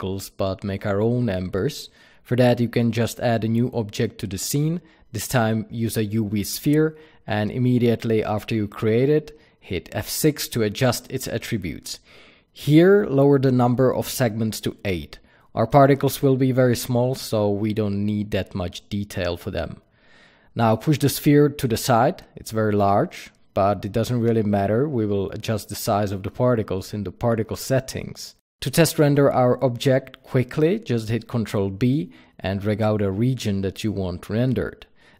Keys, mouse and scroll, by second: 3.4-4.1 scroll down 1, 4.1 shift+a, 7.7 F6, 20.6-23.9 middle drag, 21.2 g, 23.9 click, 24.3-32.2 alt+middle drag, 32.2 ctrl+b, 34.6 click.